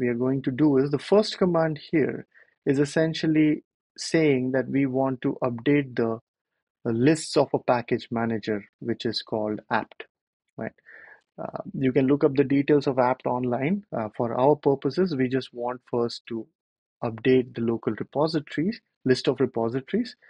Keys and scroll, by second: 1.7 super+c, 5.7 super+v, 11.1 Return, 19.0 ctrl+l.